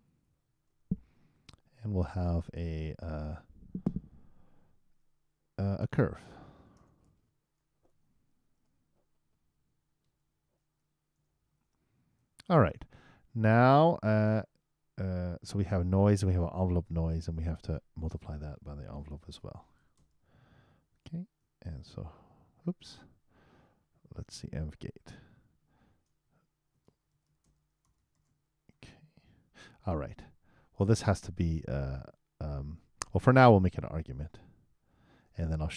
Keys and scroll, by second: 19.1 shift+8, 21.7 super+Return, 28.7 super+e.